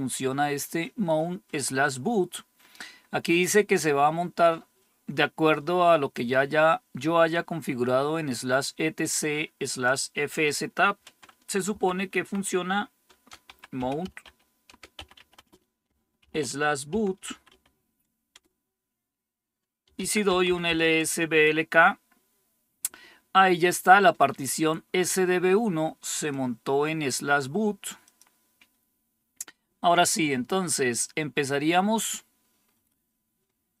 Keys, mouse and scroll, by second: 9.6-11.6 drag, 11.6-17.9 typing, 18.2 Return, 19.5-21.7 typing, 26.2 click, 27.9 click, 33.4-33.8 scroll down 2.